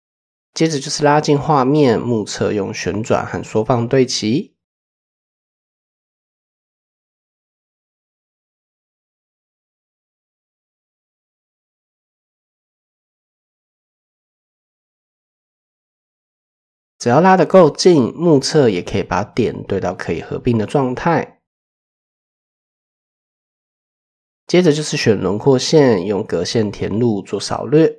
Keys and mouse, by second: 1.4 r, 3.2 s, 4.4 shift+middle drag, 5.5 shift+click, 6.2 r, 8.0 s, 10.4 r, 11.6 s, 13.7 r, 14.4 s, 16.7 shift+drag, 17.7 a, 18.5 m, 21.2 shift+drag, 22.5 shift+click, 22.9 click, 23.6-24.0 drag, 24.5 shift+click, 25.9 ctrl+f, 27.8 click.